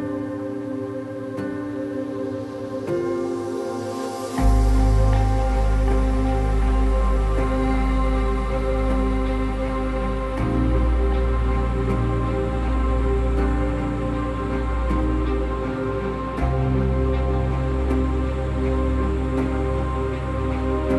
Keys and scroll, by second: 2.7 ctrl+-, 3.1 ctrl+-, 3.7 ctrl+-, 10.2 ctrl++, 10.3 ctrl++, 10.5 ctrl++.